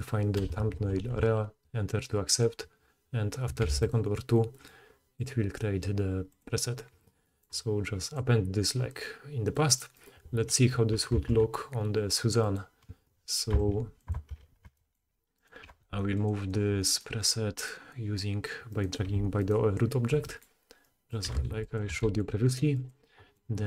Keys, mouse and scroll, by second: 1.2-4.4 drag, 3.6 x, 6.4-8.1 middle drag, 8.1-14.1 drag, 9.9 middle click, 9.9 right click, 11.1 shift+a, 13.5 s, 14.1-15.6 ctrl+middle drag, 14.3 ctrl+2, 14.6 s, 15.6 g, 16.4 click, 17.2 click, 18.6 click, 18.8-20.0 middle drag, 19.0 g, 20.0 g, 21.2 g, 21.8 g, 23.0-23.6 middle drag.